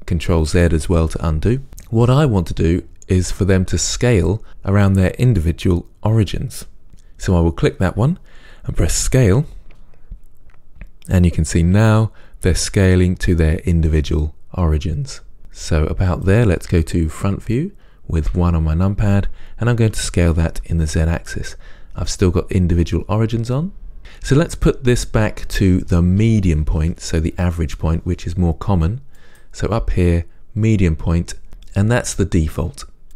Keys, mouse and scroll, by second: 9.2-18.4 drag, 9.2 s, 18.4 KP_1, 20.2 s, 24.0 click.